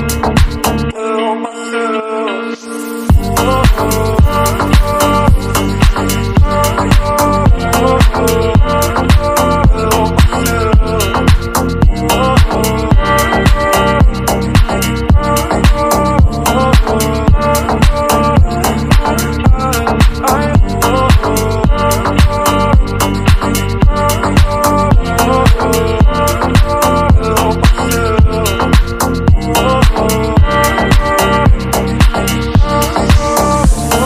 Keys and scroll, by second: 31.3 ctrl+0.